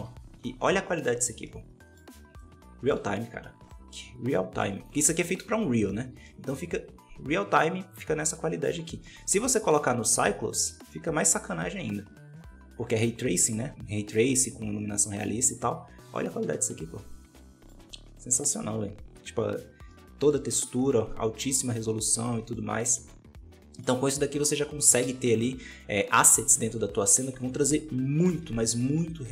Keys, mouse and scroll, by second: 0.0 ctrl+space, 0.5-1.4 scroll down 5, 1.4-4.7 middle drag, 4.7 right click, 5.3 KP_Decimal, 6.0 alt+a, 6.1-8.7 middle drag, 8.7 scroll up 2, 8.9 middle click, 9.4 scroll up 2, 9.9 z, 14.2-19.8 middle drag, 20.0 middle click, 20.2 middle click, 20.3 scroll up 5, 21.9-22.4 scroll down 6, 22.4-25.0 middle drag, 25.0 z, 26.0 right click, 26.5 x.